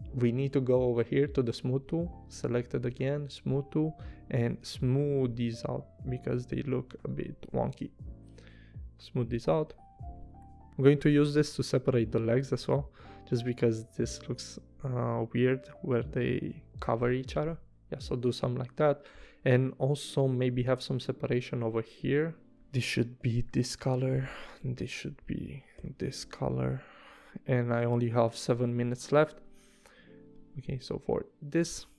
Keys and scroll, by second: 1.7 v, 9.7 v, 11.9 p, 16.7 v, 23.2 i, 24.1 v, 25.8 i, 27.1 v.